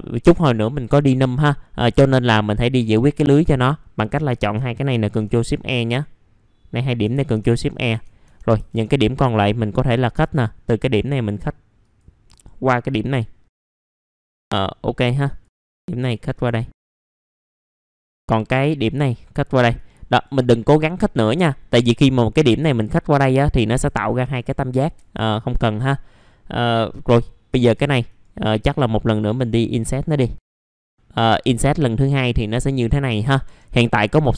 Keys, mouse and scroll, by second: 1.9-3.8 drag, 5.9 click, 9.4 click, 13.4 click, 13.9 right click, 15.2 click, 16.3 right click, 16.9 click, 17.5 right click, 18.5 click, 20.1 right click, 21.8 click, 24.3 right click, 27.0 4, 28.1 right click, 28.8-31.5 drag, 32.5 right click, 33.0-34.2 scroll up 2, 34.2 click.